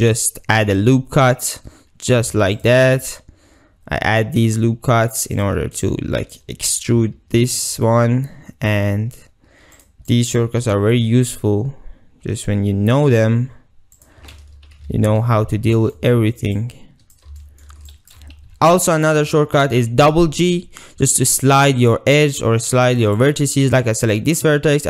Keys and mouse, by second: 2.1 click, 2.4 ctrl+r, 5.4 click, 5.9 click, 6.9 e, 9.8 click, 10.1-10.6 drag, 10.6 g, 14.0 click, 15.0 alt+z, 15.8 shift+middle click, 16.6 click, 17.4 shift+click, 17.7 shift+middle click, 17.9 shift+click, 18.5 g, 19.3 ctrl+click, 20.1 g, 20.2 g, 23.7 ctrl+z.